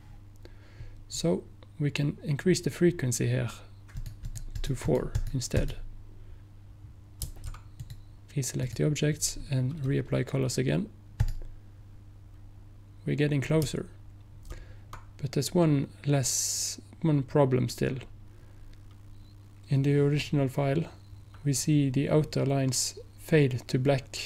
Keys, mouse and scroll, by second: 4.0 click, 7.3 click, 8.7 click.